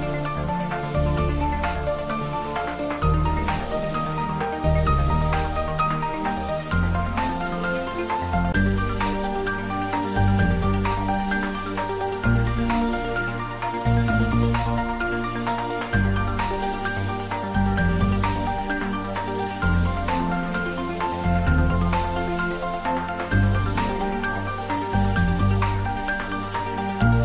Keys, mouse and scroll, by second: 1.9 3, 3.3 click, 4.6 alt+shift+click, 12.7 click, 19.7 click, 23.8 click.